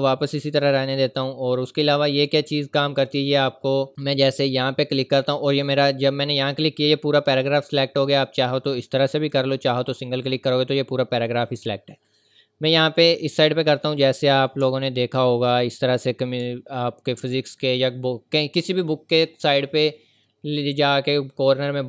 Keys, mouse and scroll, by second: 0.4 click, 2.8-3.3 scroll down 1, 3.9 click, 5.1-7.2 scroll down 1, 7.4-8.2 scroll up 1, 8.2 click, 13.1 click, 14.4-15.1 scroll down 2, 15.6 scroll down 1, 16.6-18.7 scroll up 1.